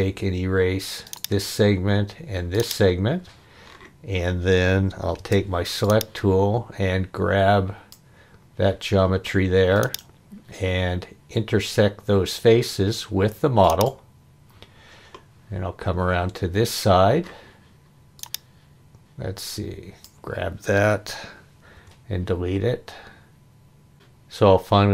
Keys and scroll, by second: 5.2 space, 21.8 Delete, 23.9 e.